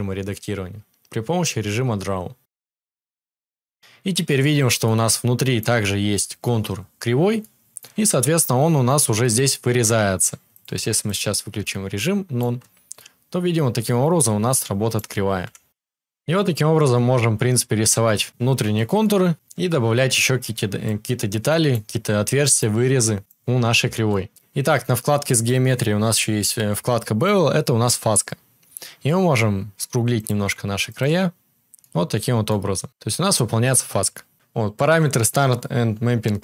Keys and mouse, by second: 4.7-36.4 shift+drag, 15.4 KP_7.